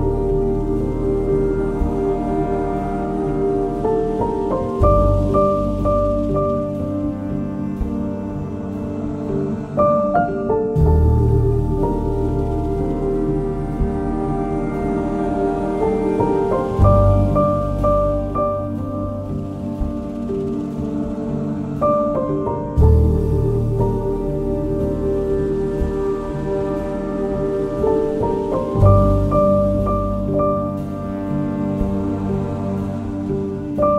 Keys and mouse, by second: 0.8 1, 1.5 shift+click, 2.3 j, 2.7 2, 3.9 ctrl+b, 5.4 click, 6.6 1, 8.1 j, 8.8 2, 9.0 click, 12.0 g, 12.6 Escape, 13.2 Tab, 14.2 Tab, 15.2 g, 15.7 Escape, 15.7 \, 16.2 shift+Tab, 16.7 g, 18.1 ctrl+b, 20.7 1, 20.9 click, 21.3 shift+click, 22.0 j, 22.4 click, 23.6 j, 24.5 shift+click, 25.3 j, 26.1 shift+click, 26.9 j, 28.5 g, 31.3 j, 31.7 click, 32.5 g, 33.7 click.